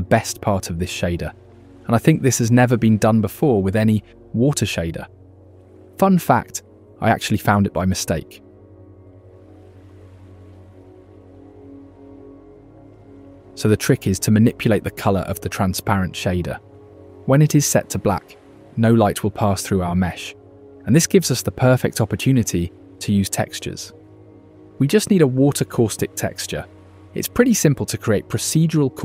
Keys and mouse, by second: 2.6 g, 4.8-5.9 drag, 7.2 Right, 8.6 KP_0, 10.3 click, 10.8 g, 14.1 click, 15.1 click, 19.2 click.